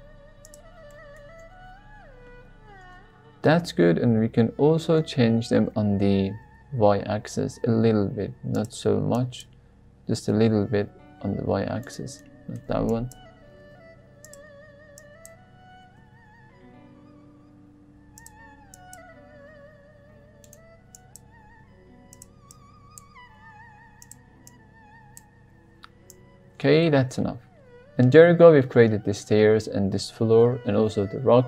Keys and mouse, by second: 0.4 click, 0.9 shift+middle click, 1.4 Tab, 2.8 Tab, 3.8-4.2 middle drag, 4.7-5.1 drag, 5.2 g, 5.7 x, 6.4 y, 8.5 drag, 9.2 drag, 10.2 g, 10.5 y, 11.8 right drag, 12.2 shift+middle click, 13.0 click, 13.4 g, 13.7 y, 14.2 click, 15.1 drag, 15.7 g, 15.9 y, 18.1 drag, 18.8 drag, 19.2 g, 19.4 y, 20.4 drag, 20.9 drag, 21.3 g, 22.1 drag, 22.6 click, 23.2 g, 23.4 y, 24.0 drag, 24.6-25.1 drag, 25.4 g, 26.1 click, 26.8 drag, 27.2 g, 27.7 drag, 28.0 g, 28.1 y, 28.5 drag, 29.6 drag, 29.9 g, 30.0 y, 30.8 click.